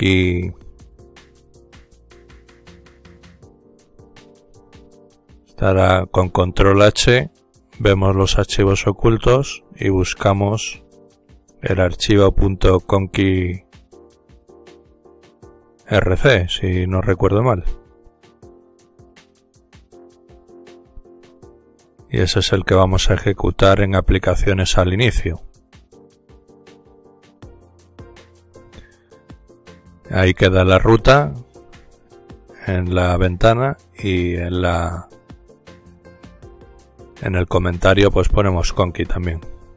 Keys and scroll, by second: 7.4 ctrl+h, 35.0 typing, 36.1-36.9 typing.